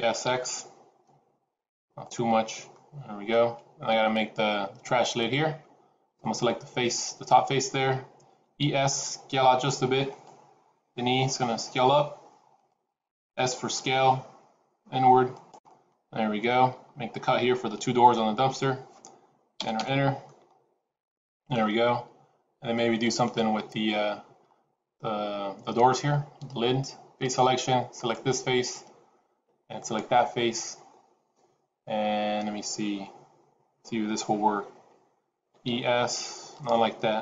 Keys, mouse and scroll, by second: 2.6 middle click, 5.3 middle click, 6.1 click, 8.2 e, 10.7 e, 13.6 s, 15.6 middle click, 17.9 ctrl+r, 20.2 middle click, 27.7 click, 27.9 click, 29.7 shift+click, 29.9 shift+click, 35.3 e.